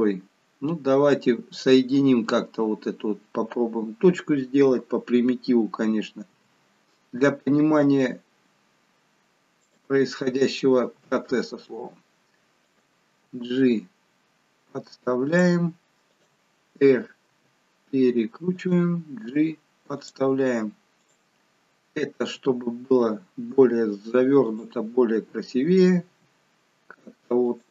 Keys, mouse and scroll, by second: 6.3 e, 10.9 r, 13.3 g, 16.0 click, 17.3 r, 19.2 g, 21.7 click, 22.3 r, 26.0 r.